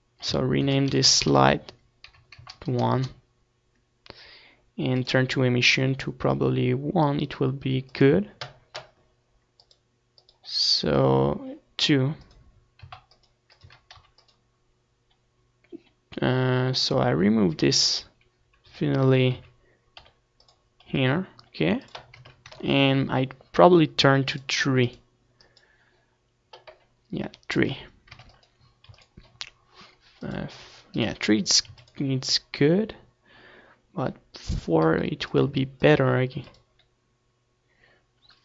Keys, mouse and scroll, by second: 11.8-13.5 drag, 14.5-17.6 drag, 18.9-20.6 right drag, 19.8 KP_7, 20.9 z, 21.4 z, 22.1 r, 22.6-25.7 drag, 23.0 g, 24.4 KP_0, 26.4-28.7 drag, 29.8-31.4 drag, 30.9 ctrl+s, 33.3 click, 33.5-34.9 middle drag, 34.1 ctrl+s, 36.7-38.4 drag.